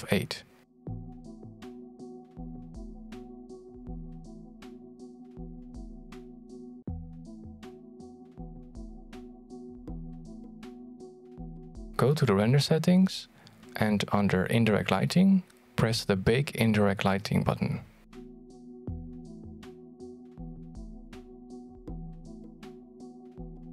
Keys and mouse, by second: 3.2-6.2 drag, 10.5 click, 13.0-14.4 middle drag, 14.4 ctrl+s, 17.1 click, 17.8 click.